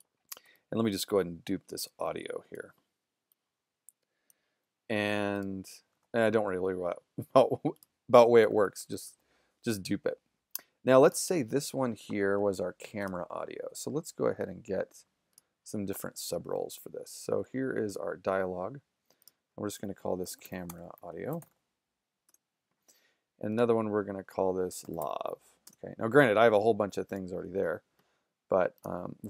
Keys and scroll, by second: 8.5 super+=, 19.7-21.9 typing, 22.3 Return, 24.6-25.5 typing, 25.7 Return.